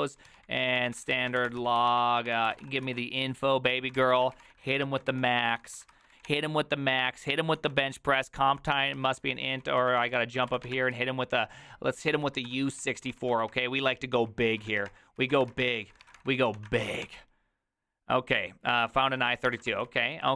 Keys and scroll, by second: 0.0-5.8 typing, 3.7 Tab, 5.9 ctrl+c, 6.2 Up, 6.3 Return, 7.6 ctrl+a, 8.8-17.5 typing, 9.0 ctrl+c, 9.2 ctrl+u, 18.9-20.3 typing.